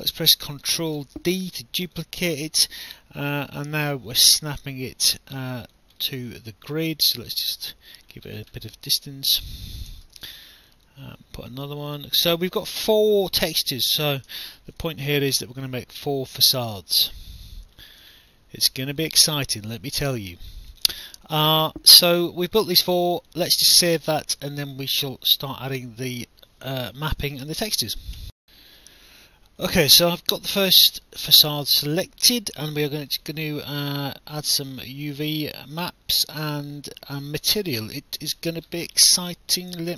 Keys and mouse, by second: 1.0 ctrl+d, 2.0 click, 4.5 alt+middle click, 5.1 alt+click, 6.0 alt+middle click, 6.7 click, 8.6 alt+middle click, 9.9 ctrl+d, 10.9 click, 13.0 alt+middle click, 14.3 ctrl+d, 15.2 alt+middle click, 16.1 click, 18.2 alt+middle click, 19.0 click, 19.5 alt+click, 20.9 alt+click, 23.3 alt+click, 28.2 alt+F9, 28.6 alt+click, 31.2 alt+click, 33.4 alt+click, 35.1 alt+click.